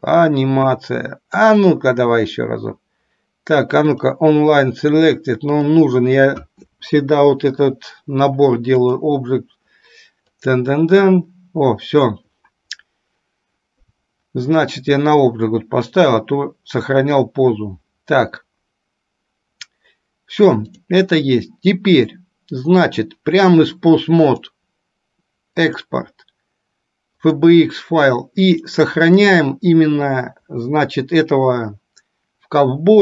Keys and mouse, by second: 20.7 click, 24.5-27.9 drag.